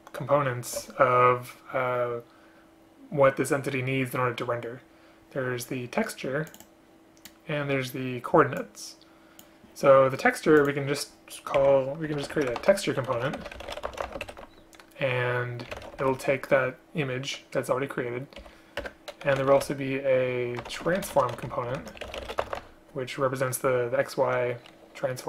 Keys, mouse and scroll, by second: 11.7 Right, 18.5 End, 18.9 Return.